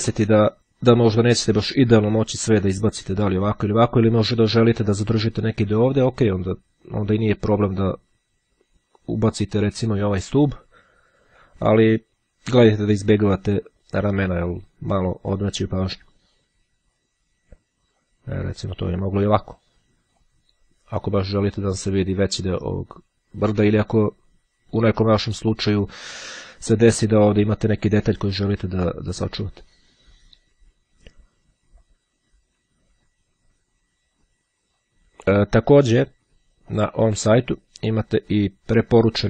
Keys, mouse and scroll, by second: 2.2-4.5 drag, 6.1-8.6 drag, 10.7-12.1 drag, 16.1-18.6 drag, 19.4-20.9 drag, 31.9-35.4 drag, 36.5-37.5 drag.